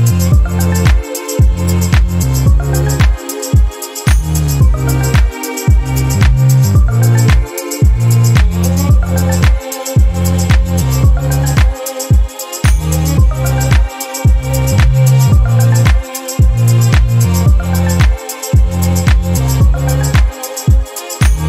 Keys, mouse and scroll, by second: 0.7 click, 4.3 click, 5.7-7.0 ctrl+drag, 7.4 ctrl+shift+click, 8.0 ctrl+shift+click, 9.3 ctrl+click, 10.1 ctrl+click, 10.6 click, 12.9 click, 13.4 space, 14.6 ctrl+d, 14.9-16.3 ctrl+drag, 17.6 ctrl+shift+d, 17.8 ctrl+shift+click, 19.1 ctrl+shift+click, 19.8 shift+click, 20.9 ctrl+shift+KP_Subtract.